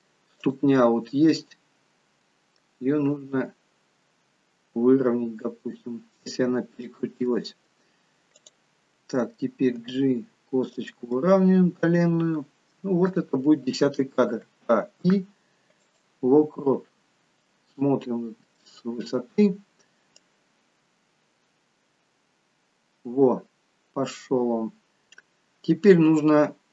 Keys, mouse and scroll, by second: 0.4 click, 0.9 middle click, 3.1 r, 7.3 middle click, 8.4 click, 10.3 g, 11.3 middle click, 14.7 i, 17.6-18.4 scroll down 1, 18.6 middle click, 18.6 scroll down 5, 20.3 click, 26.1-26.7 scroll down 3, 26.6-26.7 scroll up 2.